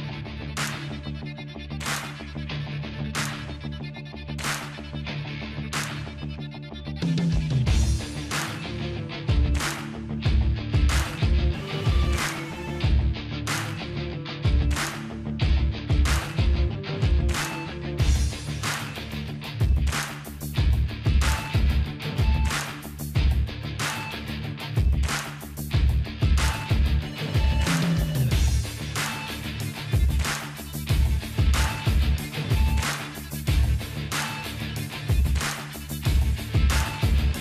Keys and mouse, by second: 0.3-1.3 drag, 0.7 s, 3.4 click, 3.8 middle click, 4.2 KP_0, 5.0 middle click, 5.5 click, 6.3 click, 7.0-8.0 drag, 7.5 z, 8.0 click, 9.0-10.1 middle drag, 11.1-12.1 drag, 12.1-13.8 middle drag, 12.4-13.4 drag, 12.6 Tab, 13.5-14.5 drag, 15.1 f, 15.9 i, 19.6 Delete, 20.3-22.0 drag, 21.3 ctrl+f, 22.2 ctrl+f, 25.7 ctrl+s, 25.8 KP_0, 26.6-30.1 middle drag, 27.0 z, 28.0-29.0 drag, 28.8 Tab, 29.4 click, 31.1-32.1 drag, 31.7 KP_0, 32.2 z, 33.5-35.4 drag, 34.8 alt+v, 35.6-37.4 drag, 36.6 shift+a.